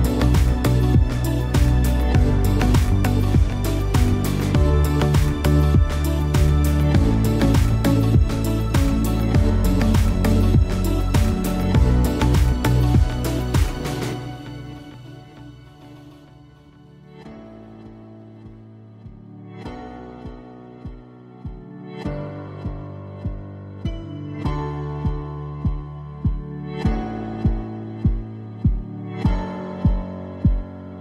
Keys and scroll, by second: 7.3 shift+super+g.